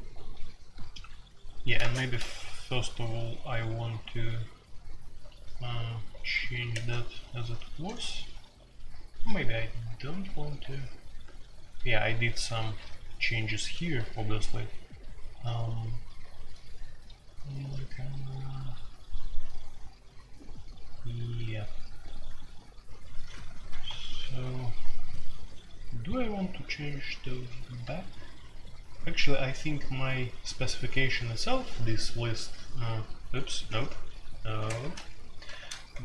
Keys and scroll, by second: 0.0-2.1 typing, 4.2-6.4 typing, 6.7 Tab, 8.3 ctrl+d, 8.7 ctrl+d, 9.5-18.5 typing, 25.9-26.4 typing, 27.8-29.1 k, 31.1-32.3 typing, 33.6 q, 34.7 ctrl+g, 34.7-36.0 typing, 35.5 ctrl+g.